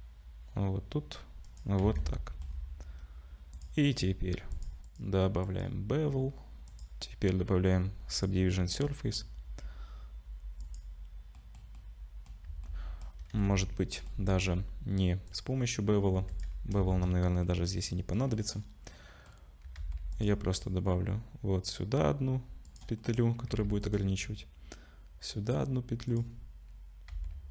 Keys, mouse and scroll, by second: 1.9 Tab, 2.0 middle click, 2.5-3.5 scroll down 3, 3.5 click, 3.5 scroll down 1, 4.0-4.5 scroll up 1, 4.5 click, 4.5-4.9 scroll up 2, 4.9 click, 7.1 click, 8.9 middle click, 9.3-9.8 scroll up 2, 10.6 click, 11.4 middle click, 11.8 middle click, 12.5 Tab, 12.6 middle click, 13.3 2, 13.4 middle click, 15.3 click, 16.1 2, 16.3 click, 16.9 shift+middle click, 17.5 middle click, 18.4 middle click, 19.0 shift+middle click, 19.2 shift+middle click, 19.8 ctrl+r, 23.0 middle click, 23.5 ctrl+r, 27.1 ctrl+r.